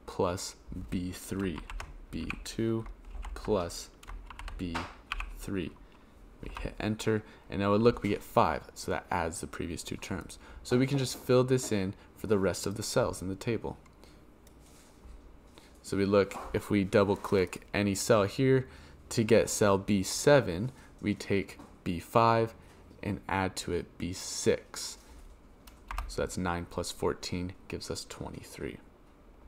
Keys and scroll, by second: 1.5 shift+b, 2.1 2, 3.0 shift+=, 4.2 shift+b, 5.0 3, 6.4 Return, 25.8 Return.